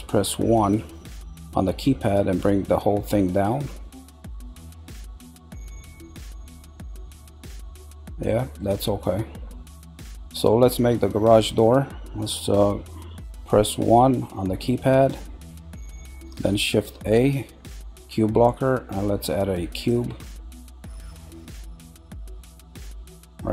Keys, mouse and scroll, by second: 0.5 KP_1, 1.1-1.5 scroll up 3, 2.7-4.0 drag, 2.8-4.0 right drag, 5.1-6.2 middle drag, 7.0-8.7 middle drag, 9.5-12.5 middle drag, 14.5-16.5 shift+middle drag.